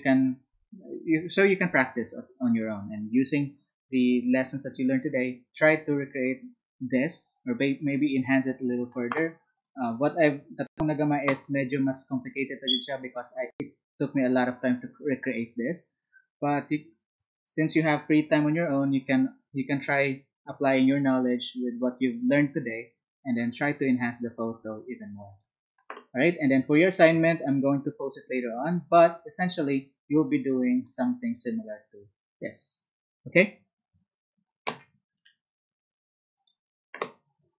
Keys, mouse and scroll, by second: 9.5 click, 10.4 click, 12.0-13.8 drag, 23.5-24.7 middle drag, 36.4 click.